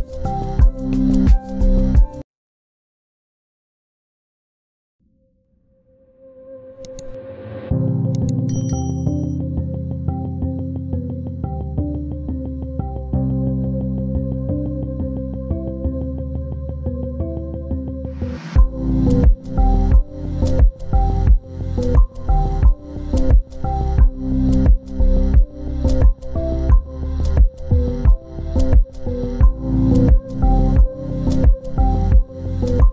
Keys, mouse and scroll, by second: 6.5 scroll down 1, 10.6-11.6 scroll up 1, 11.6 scroll down 1, 12.8 z, 14.9 ctrl+click, 17.1 scroll up 1, 19.6 scroll down 1, 20.9 double click, 21.6-23.0 scroll up 1, 28.0 scroll up 1, 28.8 ctrl+z, 32.3 scroll down 1.